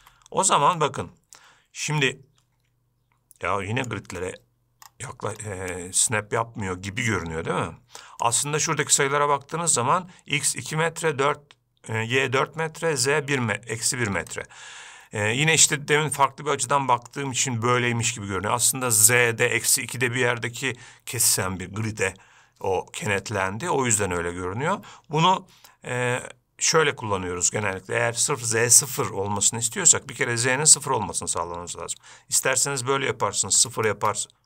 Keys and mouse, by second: 0.0-0.4 drag, 1.1-4.5 shift+drag, 6.0-8.5 shift+drag, 14.6-17.5 shift+drag, 32.9-34.4 drag.